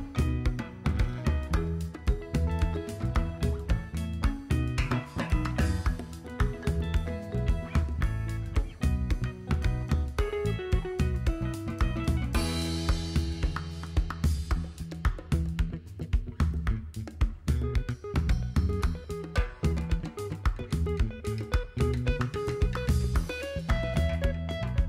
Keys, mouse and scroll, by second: 1.8 click, 3.2 s, 5.2 KP_1, 6.3 shift+middle click, 6.5 shift+middle click, 7.2-7.8 scroll down 1, 8.0-9.6 drag, 12.7 click, 14.7-15.4 scroll down 3, 15.8-17.3 scroll up 4, 17.3 KP_7, 17.5-18.8 scroll down 4, 18.9-19.2 shift+middle drag, 20.6 click, 21.5 super+c, 21.6 super+v, 22.3 click, 23.8 click, 24.4-24.8 drag.